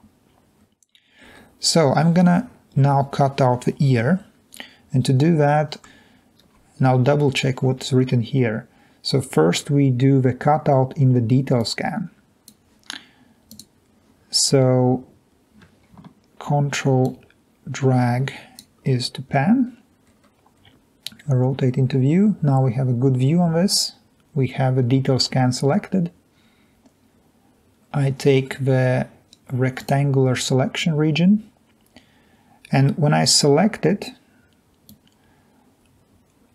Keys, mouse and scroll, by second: 0.6-2.0 scroll down 2, 6.5 alt+Tab, 17.0-18.9 ctrl+drag, 19.6-20.0 scroll up 2, 20.0-21.2 scroll down 2, 35.6-36.5 drag.